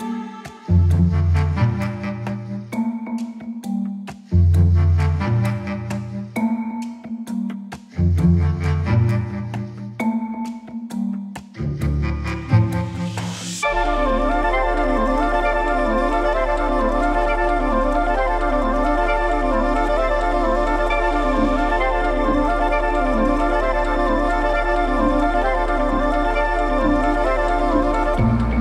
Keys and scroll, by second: 0.7 ctrl+z.